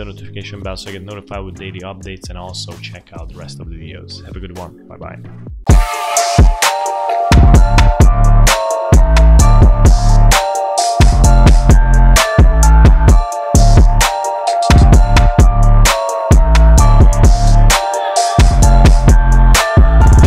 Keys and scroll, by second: 5.6 F1.